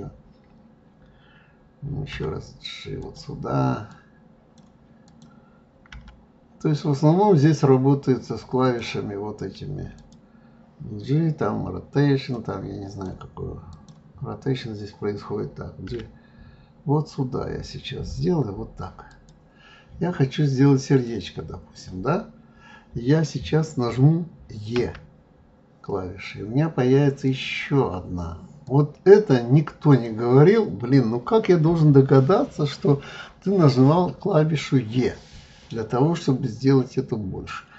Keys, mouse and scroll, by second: 2.1 g, 3.9 click, 5.0 click, 5.9 g, 9.9 click, 12.3 click, 13.7 click, 15.9 g, 20.9 click, 28.6 click, 29.9 click.